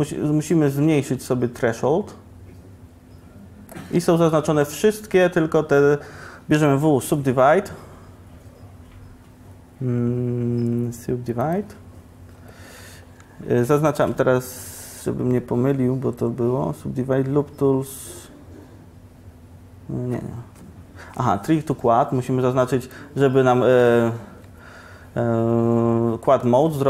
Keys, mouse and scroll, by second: 6.6 w, 22.9-26.5 drag, 23.4 right click, 26.5 middle click.